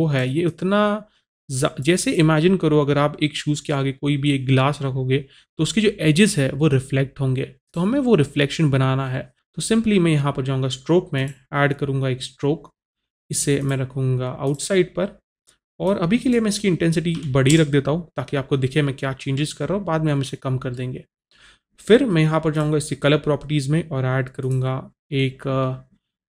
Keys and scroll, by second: 17.3 KP_3, 17.5 Return.